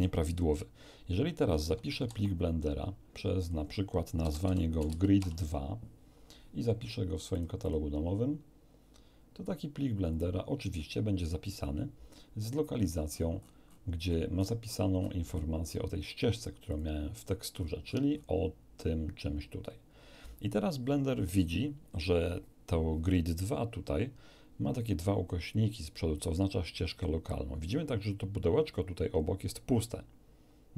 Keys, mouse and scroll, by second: 2.0 ctrl+s, 3.4 click, 4.2-5.2 typing, 7.3 click, 10.1 click, 12.7-13.3 scroll up 2, 16.7 click, 17.5-18.4 scroll up 1.